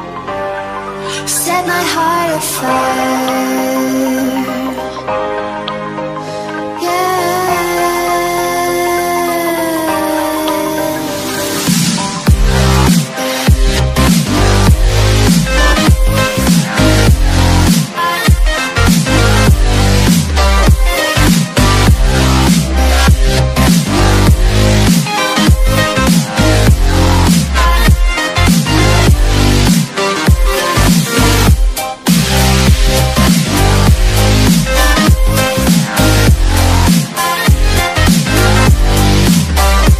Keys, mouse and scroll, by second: 0.8-2.2 scroll down 1, 2.2 click, 7.7 Tab, 10.1 Tab, 11.9 click, 13.3-15.8 scroll down 1, 15.8 click, 17.8 click, 26.0 Return, 28.8 click, 31.1 Delete, 32.8-33.2 scroll down 1, 33.8-35.1 scroll up 4, 35.5-36.3 alt+scroll down 3, 37.8 click.